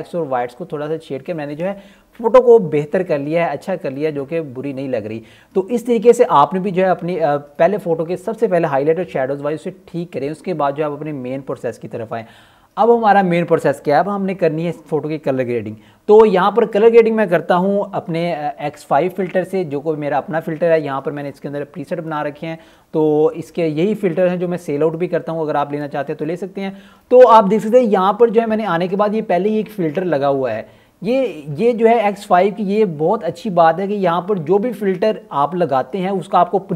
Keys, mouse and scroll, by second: 11.0 click, 16.1 click, 26.6-28.2 scroll up 1, 29.5 click, 34.3-35.0 scroll down 1.